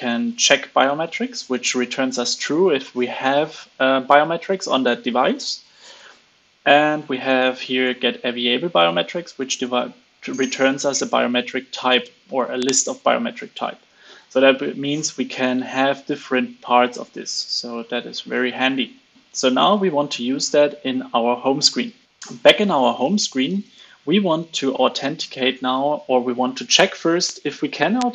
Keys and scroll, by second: 23.6 super+z, 24.1 super+c.